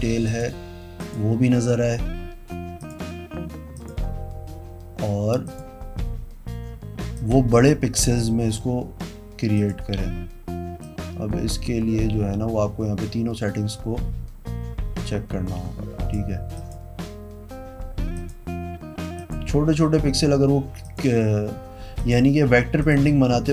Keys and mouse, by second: 0.5 click, 1.2 click, 3.0 click, 4.0 click, 5.7 click, 7.3 click, 9.7 click, 11.0-16.3 drag, 16.8 click, 18.4 click, 19.4 click, 21.0 click, 22.2 click, 23.0 click.